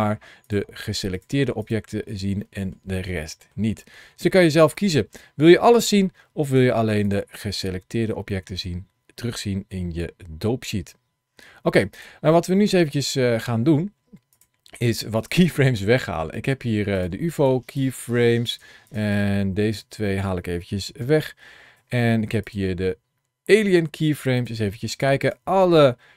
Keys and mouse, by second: 1.0 click, 1.5 click, 2.3 shift+middle click, 2.8 middle click, 3.6 shift+middle click, 4.6 shift+middle click, 6.9 click, 7.5 middle click, 8.2 shift+middle click, 11.8 click, 14.2 click, 15.2 click, 16.8 click, 17.3 click, 18.7 click, 19.1 click, 20.8 Delete, 22.3 click, 24.8 click, 25.2-26.1 drag.